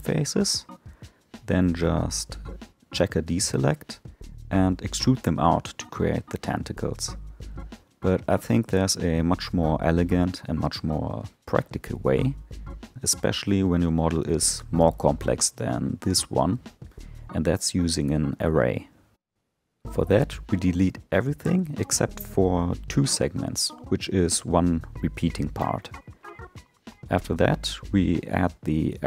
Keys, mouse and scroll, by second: 1.1-4.3 drag, 4.5 e, 8.5 ctrl+z, 10.4 Tab, 11.0 alt+middle click, 13.0-14.3 drag, 14.3 Tab, 15.1 3, 16.0 alt+click, 16.9 alt+shift+click, 17.4 scroll up 7, 18.5 shift+click, 19.4-20.9 scroll down 7, 20.9 ctrl+i, 21.5 x, 23.3 Tab, 24.6-26.4 middle drag, 26.4-28.0 drag, 28.6 click.